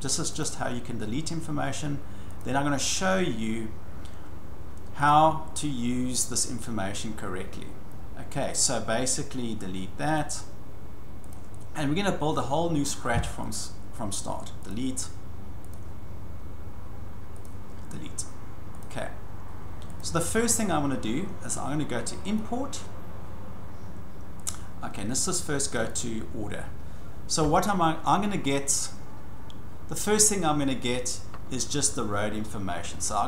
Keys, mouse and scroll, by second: 0.4 click, 2.4 click, 5.1 click, 6.2 click, 8.5 click, 10.2 click, 11.3 click, 13.5 click, 14.7 click, 15.7 click, 17.4 click, 18.8 click, 20.0 click, 22.4 click, 24.4 click, 26.0 click.